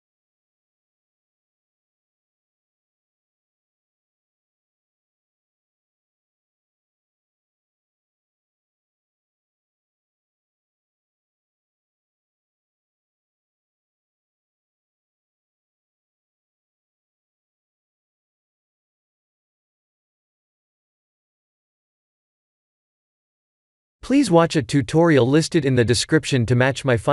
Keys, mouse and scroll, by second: 0.2 middle click, 3.1 click, 3.5 b, 4.5 KP_1, 4.9 KP_7, 5.9 shift+d, 8.4 g, 10.8 middle click, 11.0 middle click, 11.3 middle click, 11.8 middle click, 12.6 middle click, 12.7 middle click, 14.9 shift+middle click, 15.4 middle click, 15.5 middle click, 16.8-19.4 shift+middle click, 17.4 middle click, 17.8 middle click, 18.6 middle click, 18.9 middle click, 19.7 ctrl+alt+KP_0, 20.5 shift+`, 24.2 click, 25.5 click, 26.3 click.